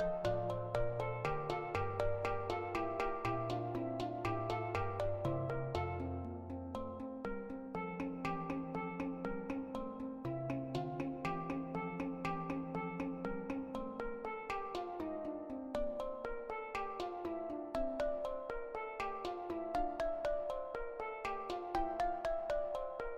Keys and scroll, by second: 14.6 ctrl+i, 14.7 Delete.